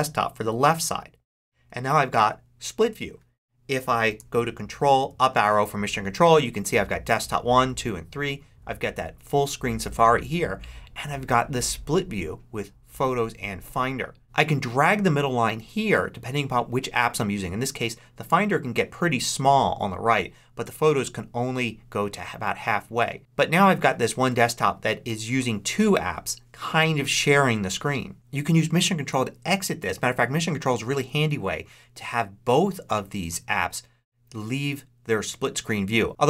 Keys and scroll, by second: 5.0 ctrl+Up, 30.8 ctrl+Up.